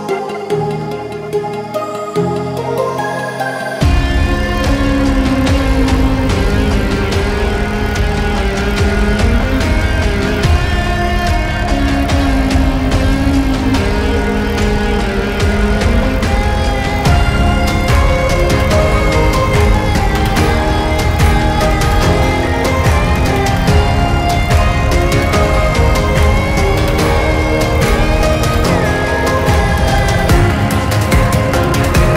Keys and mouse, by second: 0.7-1.5 typing, 9.5 click, 14.0 right click, 14.9-32.1 drag, 23.4 typing.